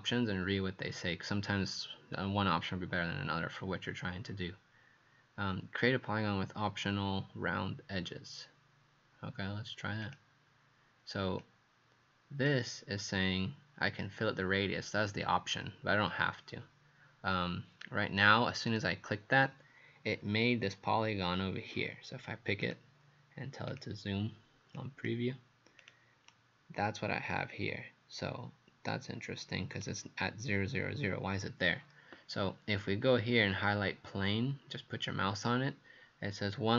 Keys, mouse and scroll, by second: 10.1 click, 26.3 right click.